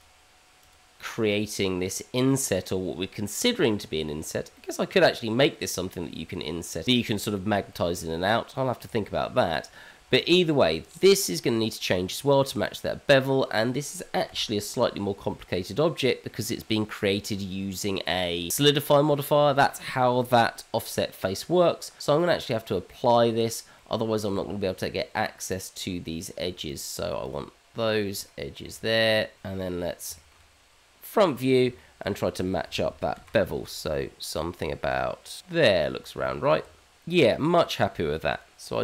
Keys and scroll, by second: 24.3 Tab, 27.9 ctrl+z, 28.5 shift+z, 29.1 KP_Divide, 29.4 shift+z, 30.3 shift+z, 32.6 ctrl+b, 35.9 Tab, 36.9 h.